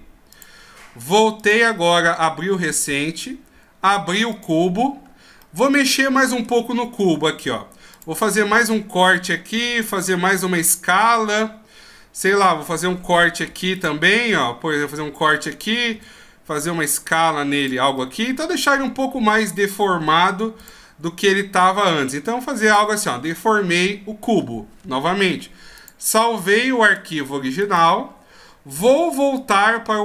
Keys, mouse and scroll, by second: 1.4 ctrl+q, 25.7 ctrl+q, 29.3 ctrl+q.